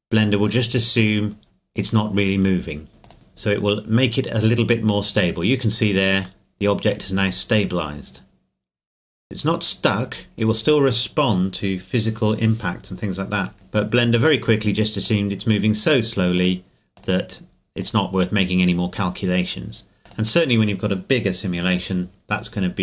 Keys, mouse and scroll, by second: 3.0 click, 6.5 middle click, 9.9 click, 14.4 click.